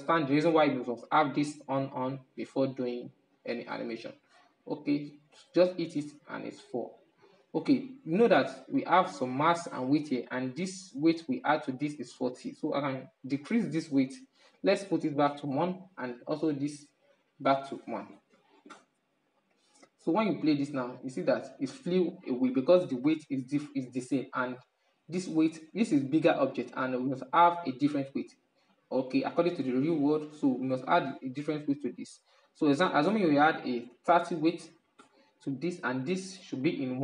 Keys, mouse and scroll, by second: 3.5-8.0 drag, 8.0-8.9 scroll up 6, 9.5-13.3 middle drag, 13.3-14.8 drag, 14.8-15.6 scroll up 1, 15.6 right click, 16.5-24.0 drag, 24.0 right click, 24.8-30.5 middle drag, 31.6-34.7 drag.